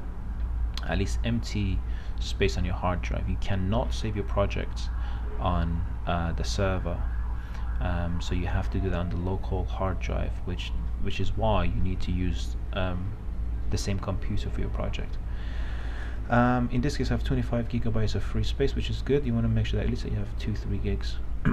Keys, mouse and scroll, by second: 0.0-21.5 drag.